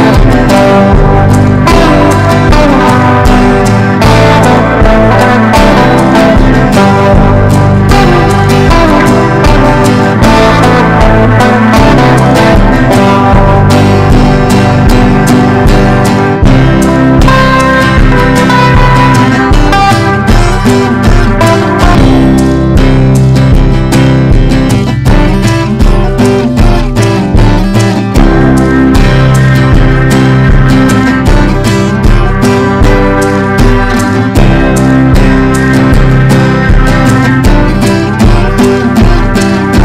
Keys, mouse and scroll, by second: 9.1 right click, 9.8-10.8 drag, 11.9 Down, 12.4 click, 20.3 F4, 20.6 click, 22.3 shift+click, 22.8 ctrl+g, 23.6-29.6 drag, 29.9 ctrl+g, 35.1-39.8 drag.